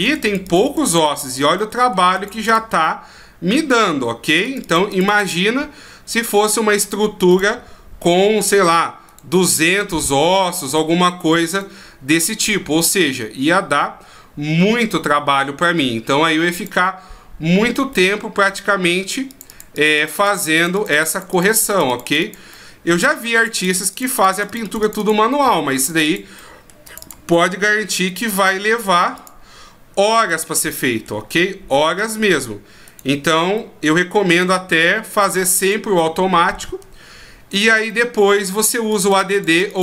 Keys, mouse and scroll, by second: 0.0 click, 0.2 click, 0.4 click, 0.6 click, 0.9 click, 1.1 click, 1.2 click, 1.6 middle click, 2.1 click, 2.3 click, 2.5 click, 2.8 middle click, 4.3 click, 4.4 click, 4.6 click, 4.9 click, 5.1 click, 7.3 click, 9.1 right click, 10.6 right click, 11.5 right click, 16.5 click, 17.9 middle click, 19.3 click, 19.5 click, 19.7 click, 20.0 click, 20.1 click, 20.3 click, 20.5 click, 20.7 click, 20.9 click, 21.2 click, 21.3 click, 21.5 click, 21.7 click, 21.9 click, 22.0 click, 22.2 click, 22.5 middle click, 23.3 click, 23.6 click, 23.7 click, 23.9 click, 24.1 click, 24.3 click, 24.5 click, 24.6 click, 24.8 click, 25.0 click, 25.3 middle click, 25.9 click, 26.0 click, 26.4 middle click, 26.8 click, 27.0 click, 27.3 middle click, 29.2 click, 30.2 right click, 30.6 middle click, 32.0 click, 32.8 right click, 33.6 middle click, 34.3 shift+right click, 34.7 middle click, 35.6 shift+right click, 36.0 middle click, 37.5 shift+right click, 37.9 middle click, 38.9 click, 39.1 click, 39.3 click, 39.5 click, 39.7 click.